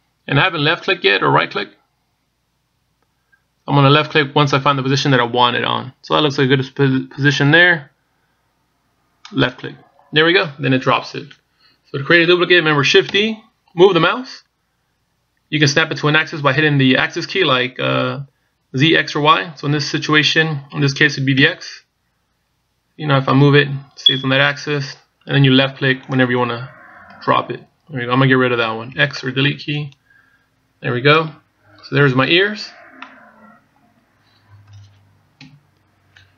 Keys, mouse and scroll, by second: 13.9 shift+d, 29.7 x, 33.8 middle click, 36.2 KP_1.